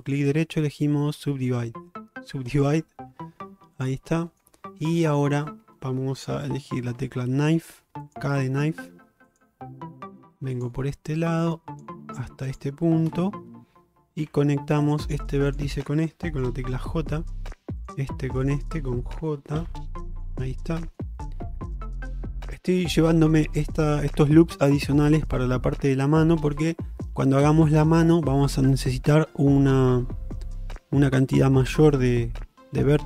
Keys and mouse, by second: 0.0-2.7 right drag, 4.3 shift+middle click, 5.2 shift+middle click, 7.0 k, 14.3 1, 14.9 click, 15.5 shift+click, 16.8 j, 17.9 click, 19.6 j, 20.9 shift+middle click, 21.2 middle click, 22.3 shift+middle click, 23.1 shift+middle click, 23.5 middle click.